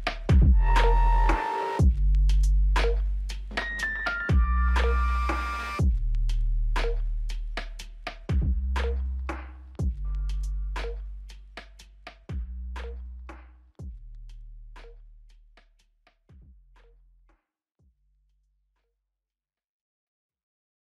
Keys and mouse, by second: 1.6 shift+click, 5.1-6.4 typing, 12.8 double click, 13.7 shift+click, 14.1 shift+double click, 14.3 shift+click, 19.9 double click.